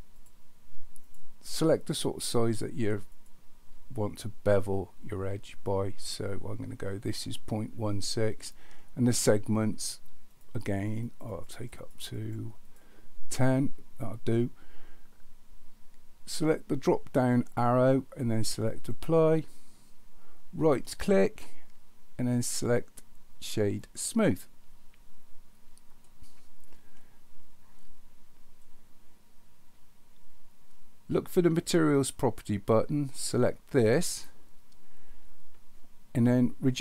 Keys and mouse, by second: 1.0 click, 3.1 click, 10.6 click, 11.0 click, 11.3 click, 11.5 click, 11.8 click, 12.1 click, 12.7 click, 17.3-18.9 drag, 20.8-24.1 drag, 26.0-27.4 middle drag, 33.3 click.